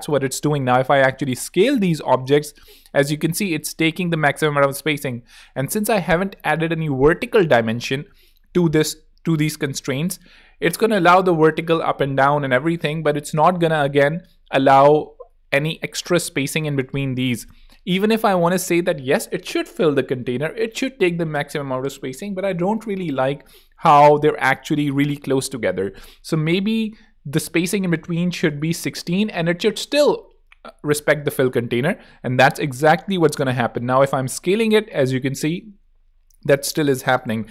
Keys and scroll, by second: 13.1 super+z, 27.1-29.7 typing.